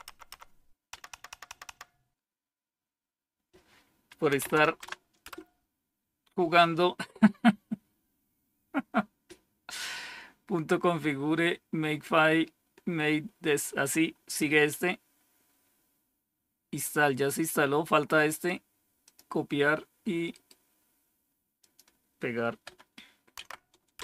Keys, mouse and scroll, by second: 0.0-1.4 typing, 4.0-5.2 typing, 18.2 right click, 19.0 click, 20.2 right click, 21.5 click, 23.3 Tab, 23.9 Return.